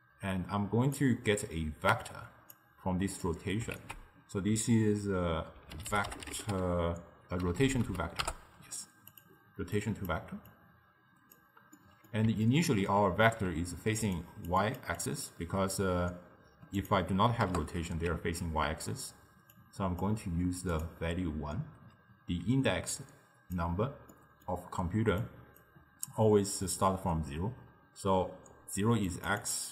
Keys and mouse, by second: 1.0 click, 3.8 ctrl+a, 7.6 Down, 7.8 Down, 9.8 click, 10.5 drag, 11.8-14.1 middle drag, 14.1-15.7 typing, 14.2 click, 14.6 click, 15.0 click, 16.8-19.7 drag, 20.7-22.7 drag, 22.7 d, 23.0-23.6 drag, 23.6 d, 23.7 d, 24.2-25.2 middle drag, 25.2 d, 25.3 click, 25.7 d, 25.7 d, 26.4 d, 28.5-29.7 typing, 29.2 click, 29.5 click.